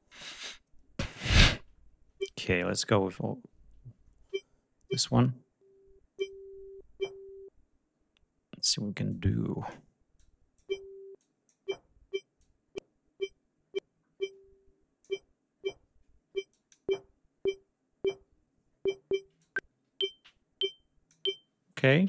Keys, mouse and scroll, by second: 4.6-6.0 drag, 8.7-9.5 drag, 9.8 click, 10.8 click, 12.0-14.8 drag, 16.1 click, 19.0-20.9 drag.